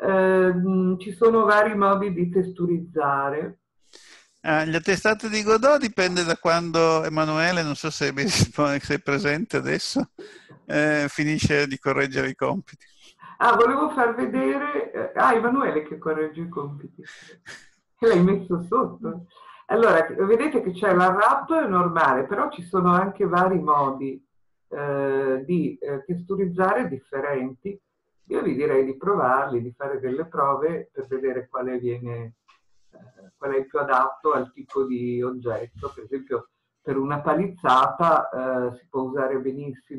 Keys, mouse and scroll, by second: 8.1 Tab.